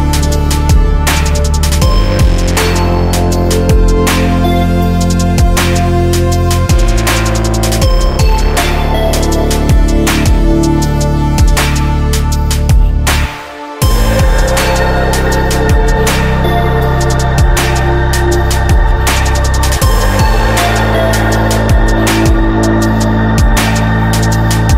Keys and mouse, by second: 8.9 click, 10.2 click, 11.4 click, 11.8-12.8 drag, 13.6 Tab, 15.5-16.7 drag, 17.6-20.1 drag, 20.1-22.4 right drag, 22.4-24.7 drag.